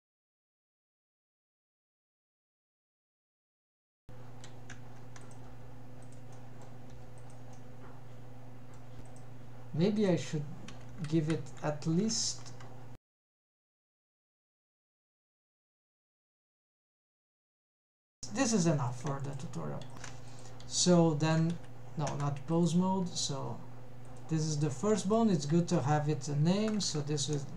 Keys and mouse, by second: 0.8 click, 1.0 g, 2.1 click, 2.5 g, 3.1 drag, 3.3 g, 4.0 middle click, 4.5 Tab, 4.7-5.2 middle drag, 5.3 g, 5.6 g, 6.4-6.8 middle drag, 7.0 g, 7.6-8.9 middle drag, 9.1 click, 10.1-12.6 drag, 13.1 click, 13.3-16.0 drag, 15.1 Left, 16.8-17.4 middle drag, 18.0-20.0 middle drag, 20.1 ctrl+Tab, 20.4 click, 20.9 g, 21.7 Escape, 22.2 Tab, 22.6 click, 23.0 g, 24.6 click, 24.9 g, 25.4 click, 25.8 F2.